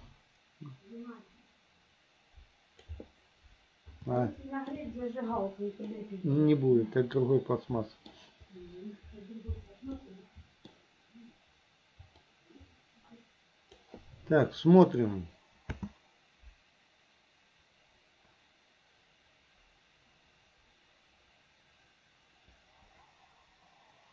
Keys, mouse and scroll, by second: 4.3 shift+middle click, 6.0-8.2 middle drag, 10.0-10.7 middle drag, 12.3-13.8 drag, 14.9 click, 15.8 space.